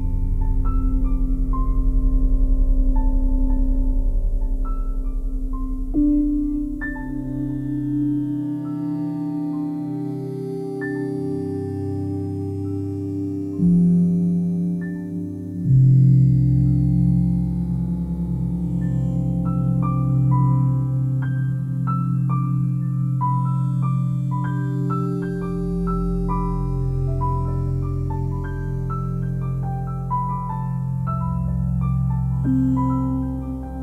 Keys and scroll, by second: 3.1 ctrl+z, 19.4 s.